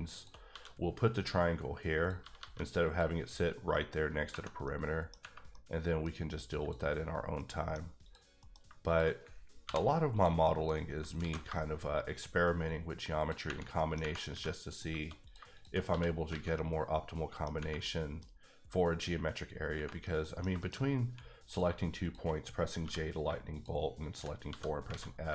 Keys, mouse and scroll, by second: 0.1 shift+click, 0.5 f, 2.2 g, 2.4 g, 2.8 click, 4.3 Tab, 4.4 scroll down 1, 4.6 middle click, 5.5 middle click, 6.6 click, 7.4 middle click, 8.0 click, 8.4 middle click, 8.9 shift+click, 9.6 j, 10.1 click, 10.4 middle click, 10.7 scroll up 2, 11.2 alt+s, 13.2 shift+click, 13.5 scroll down 1, 13.7 scroll up 1, 13.7 middle click, 14.0 Right, 14.3 3, 14.7 click, 15.2 click, 15.5 shift+click, 15.9 f, 16.1 scroll down 2, 16.3 alt+a, 16.5 middle click, 17.8 middle click, 20.2 middle click, 20.7 shift+scroll up 2, 21.0 1, 21.4 click, 22.8 j, 23.5 shift+click, 24.0 shift+double click, 24.5 f, 24.9 alt+a.